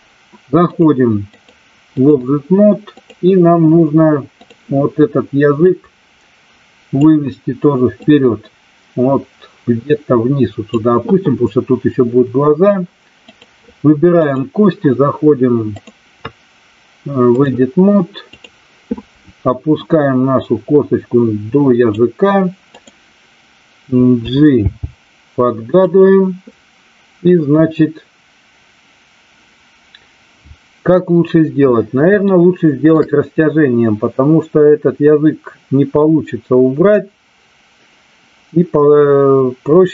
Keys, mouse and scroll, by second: 0.7 click, 1.3-2.0 drag, 5.7-7.0 drag, 7.9-10.8 drag, 13.3 click, 14.3 click, 15.8-17.4 drag, 18.3 click, 19.9-21.9 drag, 22.7 click, 24.7 g, 25.9 click, 32.1 shift+middle click.